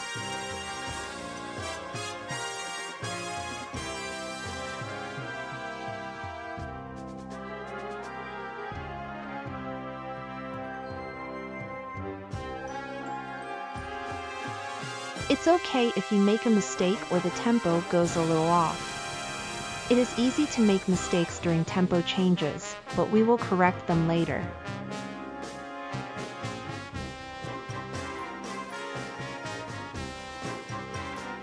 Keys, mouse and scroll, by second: 0.3 space, 1.7 space, 2.4 space, 3.2 space, 3.9 space, 5.3 space, 6.0 space, 7.3 space, 8.1 space, 8.8 space, 9.4 space, 10.9 space, 11.6 space, 14.5 space, 15.2 space, 17.0 space, 17.9 space, 22.1 click, 22.1 right click.